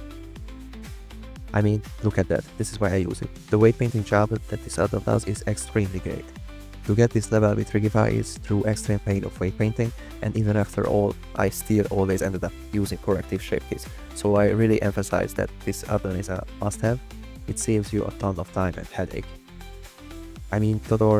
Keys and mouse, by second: 0.0 g, 1.8 click, 2.8 g, 6.9 r, 7.3 x, 10.6 click, 11.5 r, 11.7 x, 13.2 click, 14.4 click, 15.2 g, 16.1 click, 16.4 g, 18.0 drag, 18.7 g, 21.0 click.